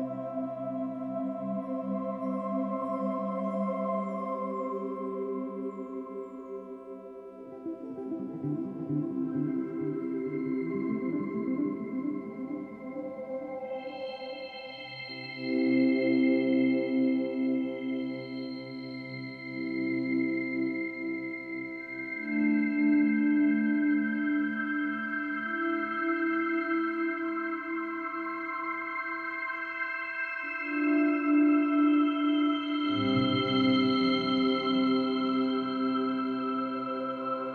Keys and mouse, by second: 0.0-1.3 drag, 1.9-3.0 ctrl+alt+drag, 7.3 click, 8.5-9.3 drag, 9.4-10.0 drag, 11.1-15.1 alt+drag, 15.3-15.9 drag, 16.4-18.5 drag, 20.3 click, 24.1 ctrl+alt+click, 24.4-26.0 alt+drag, 26.3-26.7 ctrl+alt+drag, 27.2-30.6 alt+drag, 30.9-31.5 ctrl+alt+drag, 31.9-34.1 alt+drag, 34.2-35.6 drag.